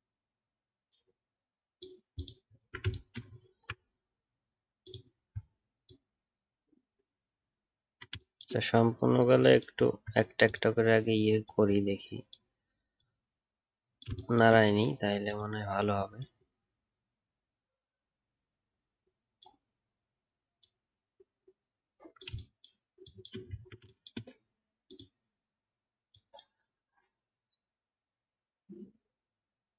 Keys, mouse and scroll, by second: 2.5 alt+scroll down 1, 3.4 alt+scroll up 2, 5.1-9.8 alt+scroll up 1, 9.8-10.3 alt+scroll up 1, 23.5 alt+scroll up 1, 23.5 alt+scroll down 2.